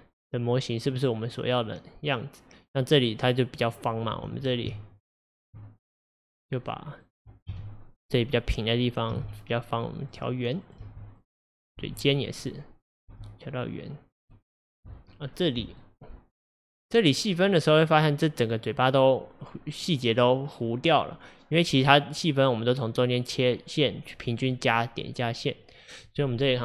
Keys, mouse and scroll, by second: 0.3-3.3 middle drag, 4.2 Tab, 4.8 Tab, 6.3 click, 7.1 click, 7.6 KP_1, 9.2 g, 10.7 click, 10.9 g, 11.6 click, 11.9 g, 12.9 click, 13.2 g, 14.4 middle click, 15.1-15.9 scroll down 2, 15.9-17.6 middle drag, 17.6 click, 21.6 click.